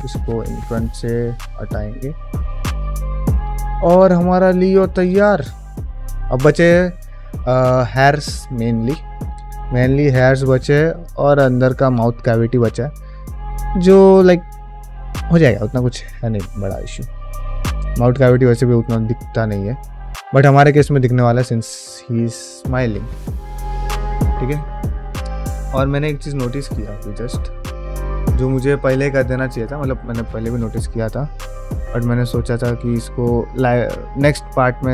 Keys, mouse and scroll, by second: 1.7 click, 2.0 shift+middle click, 2.3 click, 2.6-3.0 ctrl+middle drag, 3.2 ctrl+middle click, 3.4 shift+middle drag, 3.9 ctrl+middle click, 4.2 shift+middle drag, 4.8 ctrl+middle click, 5.0 shift+middle drag, 5.3-6.3 middle drag, 8.5-10.1 middle drag, 10.9-11.9 middle drag, 12.1-15.1 middle drag, 19.4-20.3 middle drag, 20.9-22.4 middle drag, 23.1 ctrl+middle click, 23.5 middle drag, 24.0 shift+middle click, 24.3 ctrl+middle click, 24.9 drag, 25.4 Tab, 25.9 middle click, 26.9 q, 28.3 shift+middle click, 28.7 middle click, 29.1 shift+middle click, 29.4 middle click, 30.1 2, 30.5 click, 31.0 middle click, 32.5 ctrl+click, 32.9 middle click, 34.0 ctrl+click, 34.3 middle click, 34.7 shift+middle click.